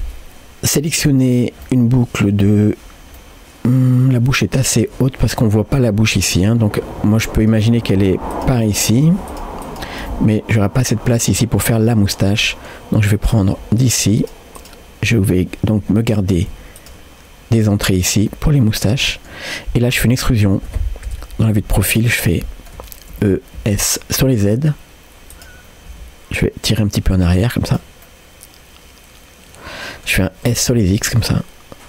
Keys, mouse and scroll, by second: 1.7 middle click, 3.2-4.2 middle drag, 7.4 click, 8.3-10.1 shift+drag, 10.1 middle click, 11.7-12.5 scroll up 2, 12.5 middle click, 13.2 click, 13.8-14.8 shift+drag, 16.2 middle click, 16.8 shift+click, 18.3-19.4 middle drag, 21.1 KP_3, 21.7-22.3 scroll up 2, 22.4 shift+middle click, 23.4 e, 28.1-30.1 middle drag, 30.5 s.